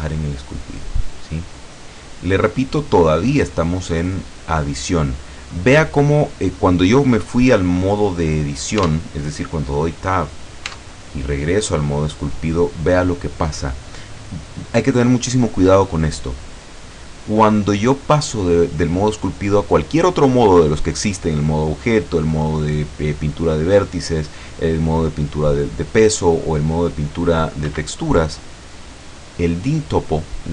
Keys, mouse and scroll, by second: 0.4 click, 1.1-2.4 drag, 2.4 scroll down 1, 2.9-3.6 scroll up 2, 5.2-5.9 scroll down 1, 6.1-7.3 scroll down 2, 8.9 Tab, 10.8 Tab, 20.1 click, 27.7 Escape.